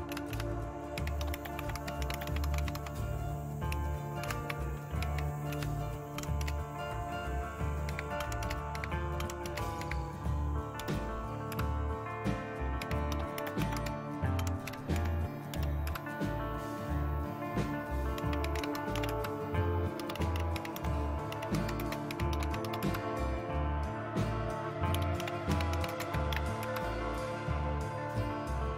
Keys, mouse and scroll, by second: 0.0-2.7 typing, 4.2-6.4 typing, 7.8-15.9 typing, 18.0-23.1 typing, 24.7-26.8 typing.